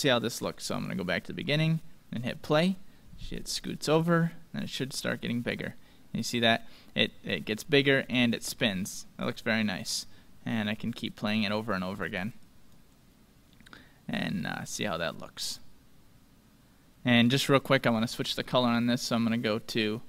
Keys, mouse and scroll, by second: 0.7-4.1 drag, 7.7-9.8 middle drag, 9.2-11.2 drag, 12.5-14.3 drag, 16.6 middle click.